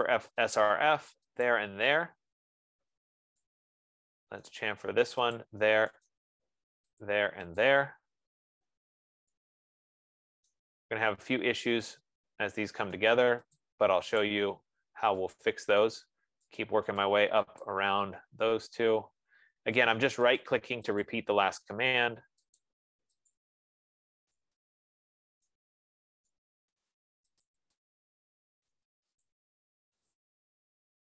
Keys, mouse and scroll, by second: 1.1 click, 2.0 click, 5.0 right click, 5.8 click, 6.5 right click, 7.5 click, 7.9 click, 11.1 right click, 12.5 middle click, 12.8 middle click, 13.2 scroll, 13.4 right click, 13.9 click, 14.7 click, 16.4 right click, 17.0 right click, 17.5 click, 17.9 click, 19.0 scroll, 19.7-20.1 scroll, 20.4 right click, 20.9 click, 21.5 click, 22.6 right click, 23.2 click, 24.0 click, 26.0 right click, 26.8 right click, 27.4 click, 27.9 click, 29.3 right click, 29.8 click, 30.2 click.